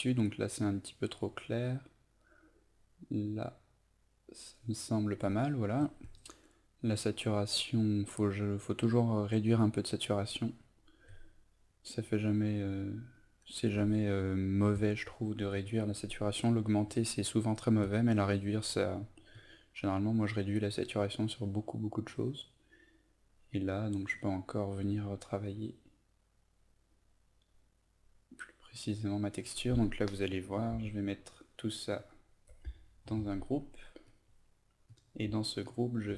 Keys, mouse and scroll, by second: 31.9 shift+click, 33.0 ctrl+g, 34.0 click, 35.6 shift+click.